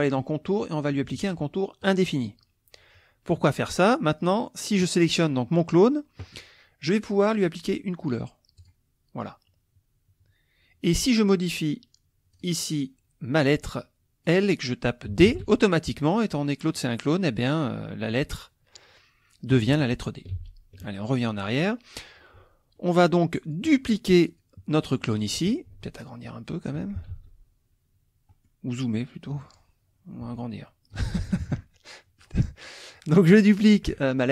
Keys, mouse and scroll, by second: 0.0 click, 1.8 click, 2.2-3.4 middle drag, 3.6 click, 7.3 click, 8.6 click, 12.3 click, 13.8 click, 15.2 shift+d, 20.3 ctrl+z, 21.6 click, 22.7 middle click, 23.4 click, 24.3 click, 25.8 ctrl+shift+click, 27.1 ctrl+shift+z, 28.3 click, 29.1-29.7 drag, 30.3-31.1 ctrl+shift+drag, 31.4 ctrl+shift+KP_Subtract, 31.9 click, 32.6-33.3 drag.